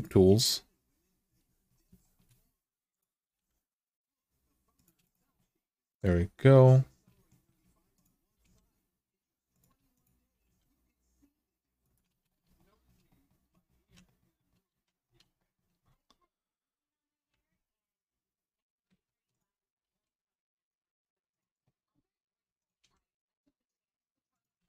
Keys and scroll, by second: 3.1 g, 8.1 g, 10.1 g, 14.5 alt+z, 17.1 alt+z, 18.6 alt+z, 19.6 g, 22.5 g.